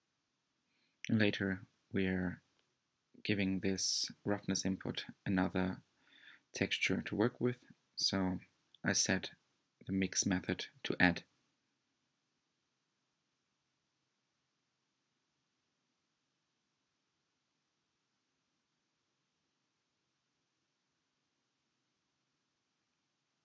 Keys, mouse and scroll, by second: 2.2-5.2 drag, 10.3 click, 17.4 click, 22.0-23.4 middle drag.